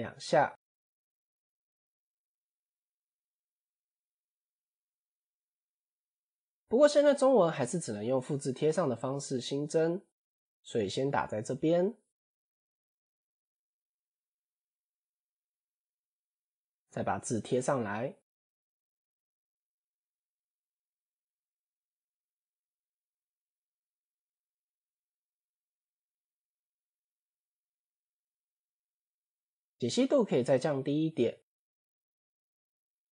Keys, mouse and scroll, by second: 2.8-3.3 scroll down 5, 4.5 Tab, 6.0-13.4 drag, 13.9-14.7 scroll up 6, 15.4 BackSpace, 15.6 BackSpace, 15.8 BackSpace, 16.3 BackSpace, 17.3 ctrl+v, 19.4 Left, 19.8 BackSpace, 21.8 Tab, 22.1-22.9 scroll down 10, 23.0 scroll up 3, 23.3 s, 25.5 s, 26.7 scroll up 1, 28.5-29.6 scroll up 14, 29.6-32.0 drag.